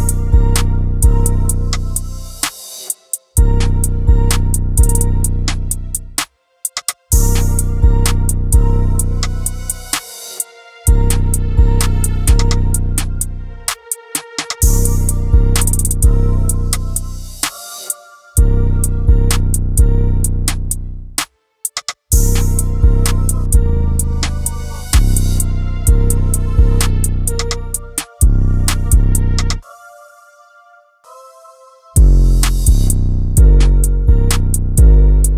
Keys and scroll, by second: 0.0 Down, 0.4 Down, 20.2 Delete, 28.2 ctrl+g.